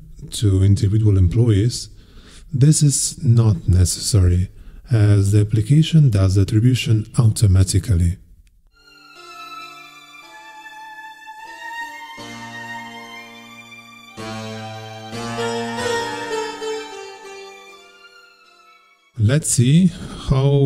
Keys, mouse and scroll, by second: 0.2 click.